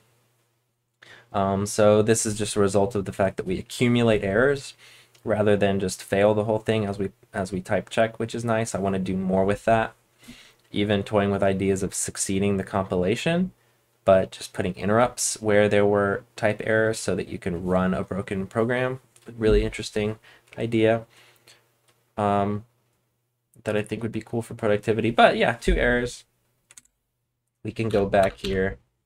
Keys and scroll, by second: 26.7 super+Tab, 27.8-28.4 typing.